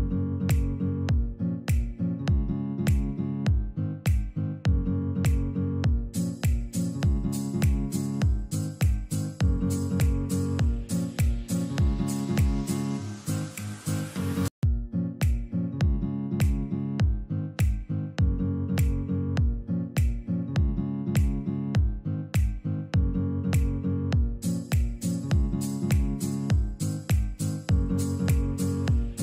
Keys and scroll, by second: 0.4 F2, 1.3 alt+c, 6.5 alt+c, 7.5 Escape, 8.2 F3, 8.6 Escape, 9.6 ctrl+z, 11.4 Escape, 14.6 alt+c, 15.9 Escape, 17.1 F2, 17.9 Escape, 22.9 alt+c.